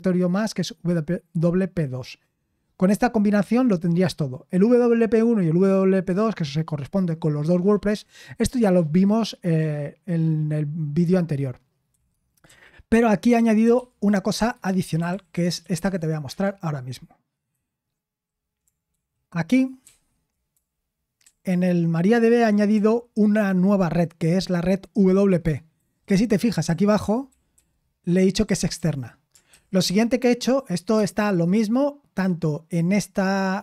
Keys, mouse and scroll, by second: 14.5 Return, 14.5-16.2 typing, 17.5-18.2 typing, 18.9 ctrl+d, 19.5-23.2 typing, 26.3-33.6 typing.